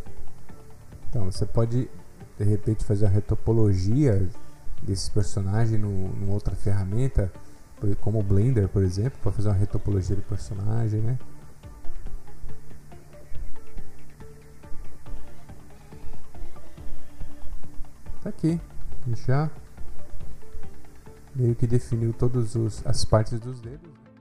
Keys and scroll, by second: 20.0 ctrl+alt+s, 22.1 ctrl+alt+s.